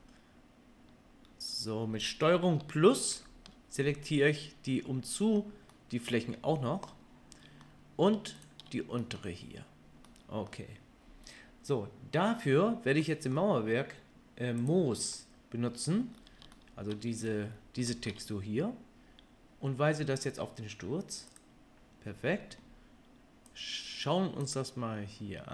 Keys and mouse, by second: 3.1 ctrl+KP_Add, 14.6 click, 14.7-21.3 middle drag, 21.3-25.5 drag.